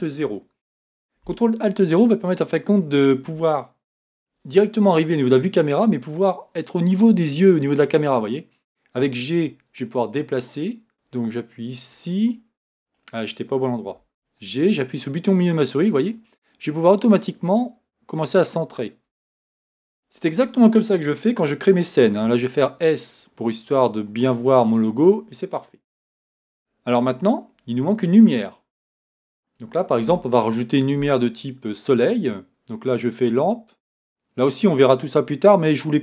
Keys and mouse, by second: 0.0 ctrl+alt+KP_0, 9.0 g, 10.9 ctrl+alt+KP_0, 14.0 g, 22.2 s, 28.5-30.0 right drag, 30.0 shift+a.